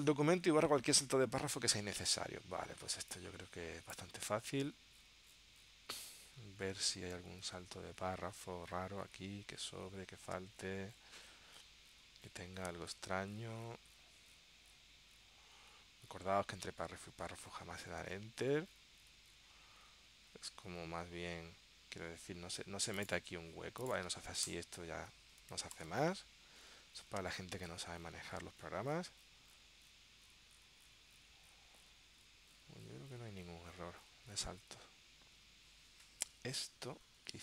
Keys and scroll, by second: 25.9 super+z.